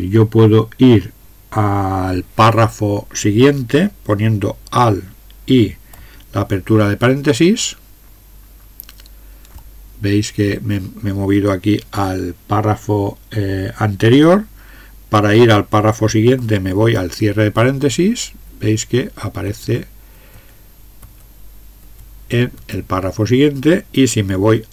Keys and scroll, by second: 6.8 alt+(, 17.4 alt+), 18.5 alt+), 19.5 alt+), 20.2 alt+), 21.0 alt+), 21.8 alt+), 22.6 alt+).